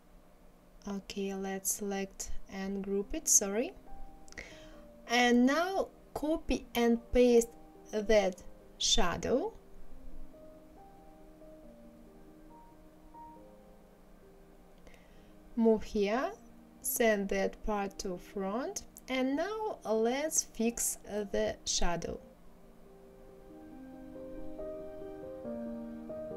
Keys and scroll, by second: 13.1 ctrl+c, 13.4 ctrl+v.